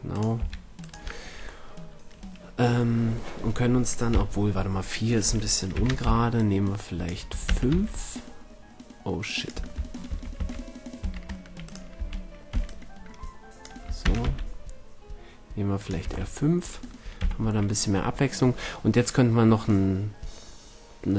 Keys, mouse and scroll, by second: 0.3 g, 4.1 KP_1, 5.7 z, 6.0 b, 7.4 shift+d, 9.4 click, 10.1 ctrl+z, 10.3 ctrl+z, 11.0 ctrl+z, 11.9 a, 12.5 b, 14.0 shift+d, 15.9-16.4 drag, 16.0 a, 17.1 z, 17.5 drag, 17.6 click, 19.1 middle click.